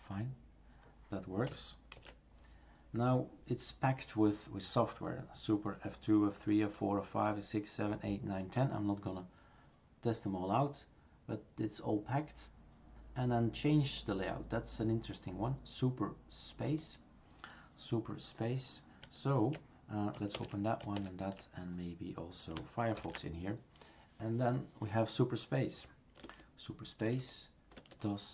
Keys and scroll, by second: 2.0 shift+super+q, 20.4 super+Return, 23.0 ctrl+alt+f, 26.2 super+space, 27.1 super+space.